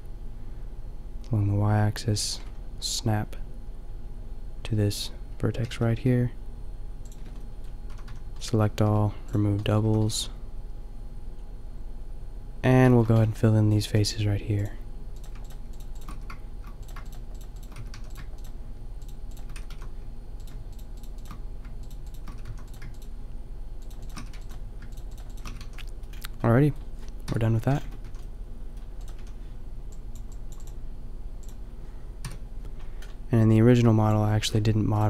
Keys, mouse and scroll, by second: 5.6 g, 7.8 a, 8.0 a, 8.8 w, 9.8 a, 16.2 f, 17.7 f, 17.9 a, 19.5 f, 19.7 a, 22.3 f, 22.5 a, 24.2 f, 24.4 a, 25.5 f, 25.6 a, 27.2 KP_5, 27.8 Tab, 28.1 a, 29.1 a, 32.2 KP_5.